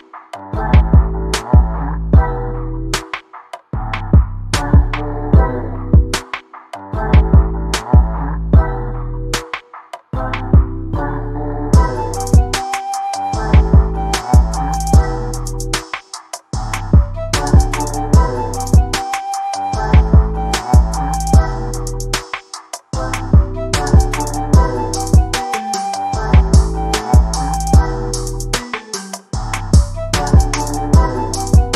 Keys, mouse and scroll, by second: 1.7 Tab, 1.9 click, 2.9 click, 3.8 g, 5.3-7.6 typing, 11.2-14.1 typing, 12.8 click, 13.4 click, 13.9 shift+middle click, 15.1 shift+click, 15.6 click, 15.8-20.2 typing, 18.2 click, 18.5 click, 19.0 shift+middle click, 20.2 click, 22.1 click, 22.4 g, 23.0 g, 23.5 middle click, 24.1 shift+middle click, 25.0 click, 25.4 g, 27.0-27.5 middle drag, 27.8 middle click, 28.2 middle click, 28.6 KP_1, 28.8 Tab, 29.1 click, 29.5 middle click, 30.1 Tab, 30.6 middle click, 30.8-31.2 middle drag.